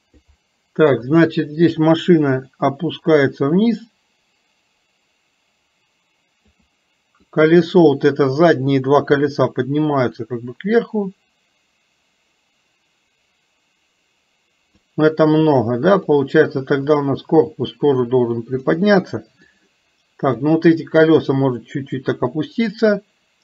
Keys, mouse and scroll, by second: 1.3 click, 2.5 click, 3.1-6.6 drag, 7.5 click, 8.9-14.7 drag, 16.0 click, 17.2-18.9 drag, 19.5-20.5 drag, 21.8-22.9 drag.